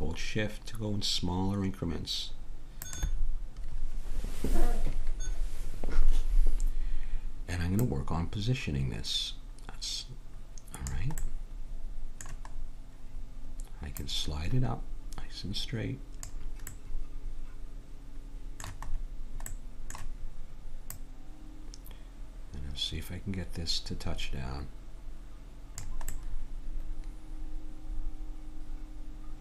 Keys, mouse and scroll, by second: 7.9-9.6 drag, 11.2-12.6 middle drag, 16.9 middle click, 17.2 click, 17.8 middle click, 20.9-23.8 drag, 26.2 middle click.